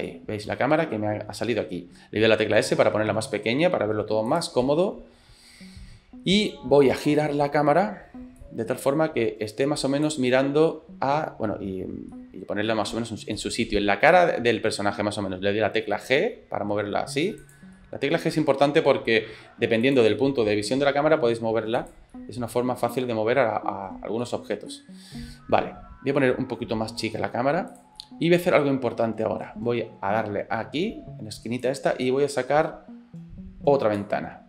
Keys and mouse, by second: 0.1-1.6 middle drag, 2.5 s, 4.6 middle click, 7.1 click, 7.6 middle click, 8.4-10.2 drag, 12.1 middle click, 16.1 g, 17.8 middle click, 18.7 g, 20.1 middle click, 20.6 click, 21.1 g, 22.1-23.9 drag, 24.3 middle click, 24.7-26.1 middle drag, 26.9 s, 28.0-29.4 middle drag, 31.7-34.0 drag.